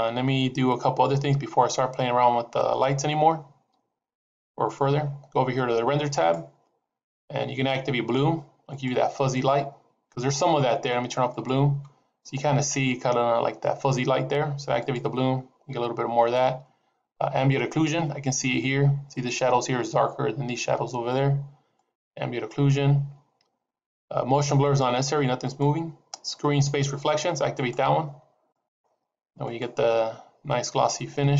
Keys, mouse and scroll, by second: 6.0 click, 9.2 click, 11.6 click, 14.8 click, 21.9 click, 24.9 click, 25.4 click, 27.6 click, 28.7 click, 29.6 click.